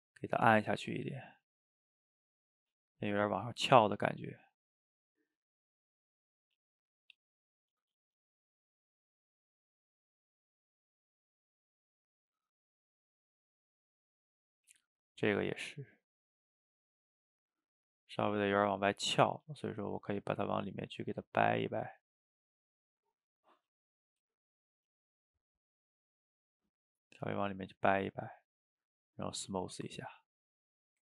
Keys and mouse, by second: 0.5 middle click, 1.5 click, 2.3 middle click, 2.9-4.4 drag, 4.4 middle click, 5.1 click, 5.6 middle click, 6.4 click, 6.9 middle click, 7.6-9.0 drag, 9.0 middle click, 9.4-10.4 drag, 10.4 middle click, 11.0-12.1 drag, 12.1-13.2 middle drag, 13.2 click, 13.6-14.6 middle drag, 14.6 f, 15.1 middle click, 15.8-17.3 drag, 17.3 middle click, 17.9 click, 18.1 middle click, 18.7 click, 19.4 middle click, 20.2-22.0 drag, 22.0 middle click, 22.6 click, 23.5 middle click, 24.1 f, 24.8-25.8 drag, 25.8-27.7 middle drag, 27.7-29.3 shift+drag, 29.3-31.0 middle drag.